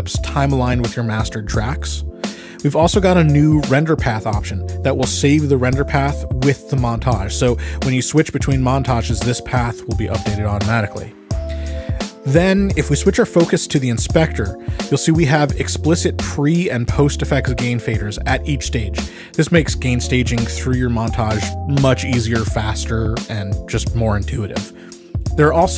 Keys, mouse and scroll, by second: 2.8 Escape, 4.6 click, 8.5 click, 11.0 click, 12.2 click, 19.0 click, 20.4 click, 21.7 click.